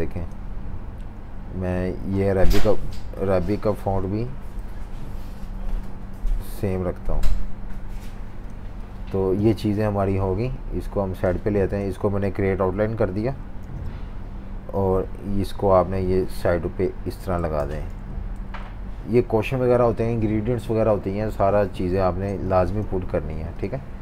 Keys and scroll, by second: 4.5 i, 6.5 v, 13.6 super+g, 18.4 shift+super+Left, 18.6 shift+super+Left, 19.1 Left, 19.2 Left.